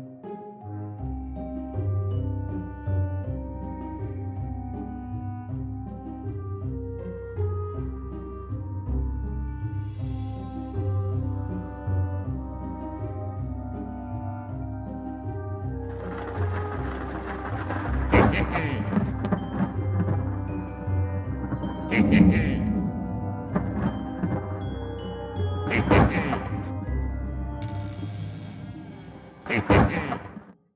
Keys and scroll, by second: 1.3 ctrl+c, 1.6 ctrl+v, 2.7 ctrl+s, 5.1 space, 8.9 space, 12.5 ctrl+s.